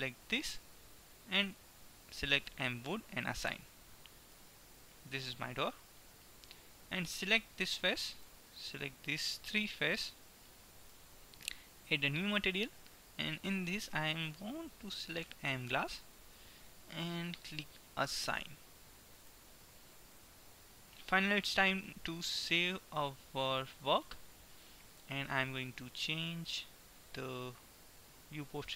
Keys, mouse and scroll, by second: 2.2-5.0 drag, 7.0 middle click, 9.2-11.8 right drag, 10.7-13.0 middle drag, 12.0-15.2 drag, 18.0 click, 18.8-20.0 middle drag, 20.3 Tab, 22.2 ctrl+s, 26.2-28.0 drag.